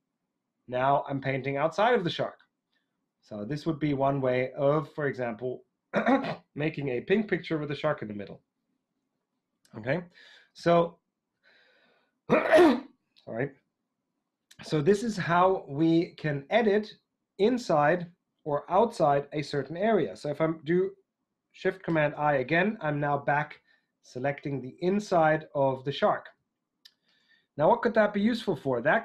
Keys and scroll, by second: 10.7 super+z, 21.8 shift+super+i.